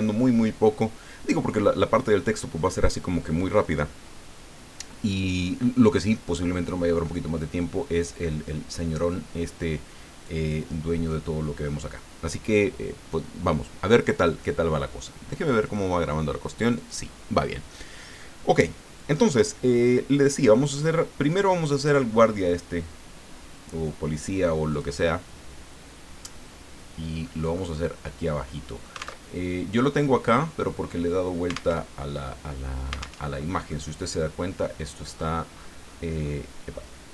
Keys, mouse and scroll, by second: 10.2-11.3 drag, 15.6 click, 16.8 click, 24.7 click, 26.2-27.7 middle drag, 28.3-29.3 drag, 29.3 alt+Tab, 31.7 alt+Tab, 33.3 alt+Tab, 33.7-34.7 drag, 35.1-35.9 scroll up 2, 35.9-37.1 scroll down 5.